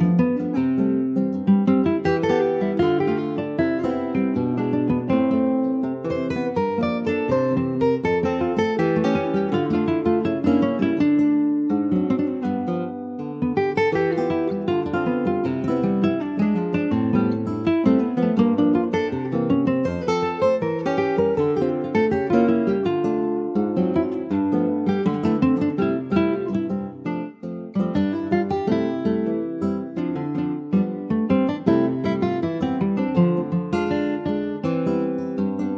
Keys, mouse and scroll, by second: 0.2-1.9 shift+middle drag, 1.9 ctrl+r, 7.3-8.3 middle drag, 8.3 shift+d, 9.5 middle click, 9.9 w, 10.9 e, 11.7 alt+s, 13.8 Tab, 14.1 click, 14.5 middle click, 15.0 ctrl+s, 15.1 click, 15.5 middle click, 15.7-16.1 scroll up 1, 16.8 2, 16.9 click, 17.8 alt+shift+click, 18.3-19.7 middle drag, 19.7 alt+shift+click, 20.7 ctrl+b, 23.3 Tab, 23.9 scroll down 3, 24.3 middle click, 24.8 ctrl+s, 24.9 click, 25.2-27.9 shift+middle drag, 27.9 ctrl+s, 28.6 click, 29.1 shift+middle click, 29.6 ctrl+s, 30.2 middle click, 30.6 click, 31.8 ctrl+s, 31.8 click, 32.3 alt+middle click, 33.5 ctrl+s, 34.2 shift+d, 35.5 click.